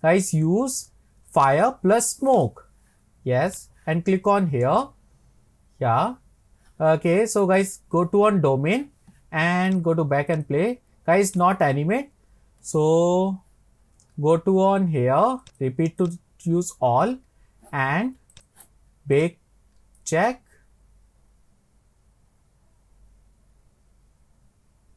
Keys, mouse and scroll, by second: 3.5 click, 5.7-6.0 scroll down 3, 6.3 scroll up 4, 7.6 click, 9.7-12.3 drag, 12.3-15.4 scroll down 24, 15.4-24.9 drag.